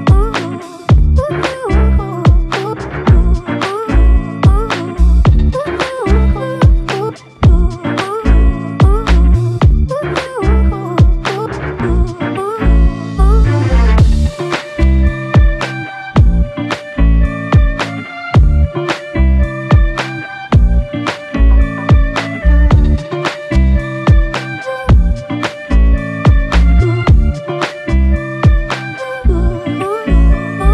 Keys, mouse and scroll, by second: 10.1 f.